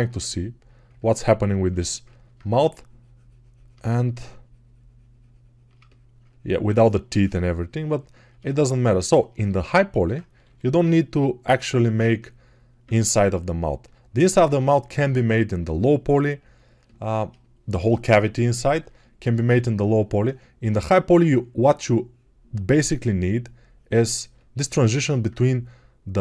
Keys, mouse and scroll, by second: 1.6 x, 10.3 g.